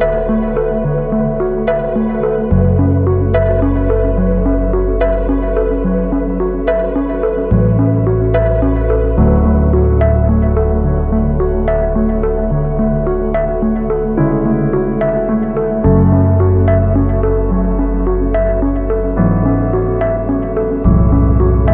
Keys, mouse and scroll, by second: 11.5 click, 12.2 click, 12.6 click, 21.5 double click.